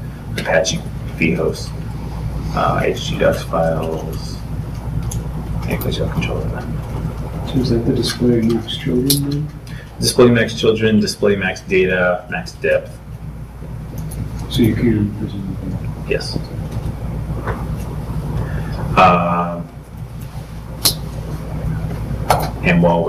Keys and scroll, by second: 15.8 super+Tab, 19.4 super+Tab, 21.2 super+Tab.